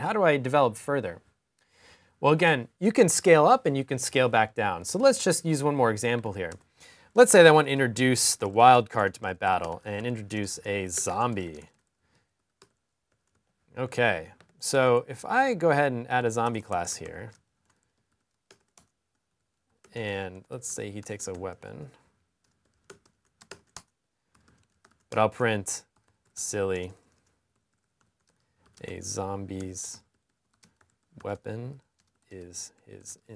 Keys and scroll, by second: 6.8-10.2 typing, 13.3-16.3 typing, 18.6-19.8 typing, 20.9-21.6 typing, 25.0-33.3 typing.